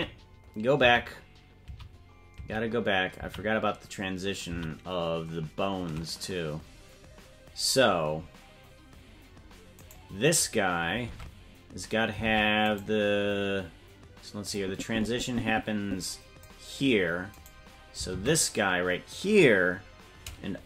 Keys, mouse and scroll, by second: 0.2 ctrl+z, 1.1 ctrl+z, 2.0 ctrl+z, 2.7 ctrl+z, 3.5 ctrl+z, 4.8 ctrl+z, 9.9 right click, 11.1 ctrl+Tab, 12.3 ctrl+Tab, 12.7 right click, 14.5-16.4 drag, 17.4 right click, 18.1 ctrl+Tab.